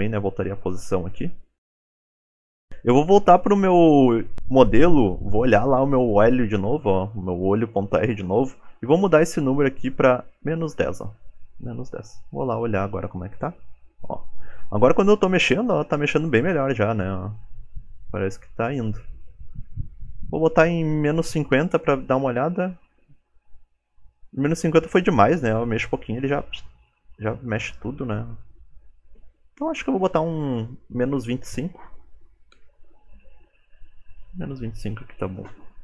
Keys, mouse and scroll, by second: 1.9 ctrl+Tab, 2.3 click, 8.7 ctrl+Tab, 8.7 click, 11.8 ctrl+Tab, 12.9 g, 18.3 ctrl+Tab, 18.4 click, 19.7 click, 21.9 click, 22.5 ctrl+Tab, 23.2 g, 32.5 ctrl+Tab, 32.7 click.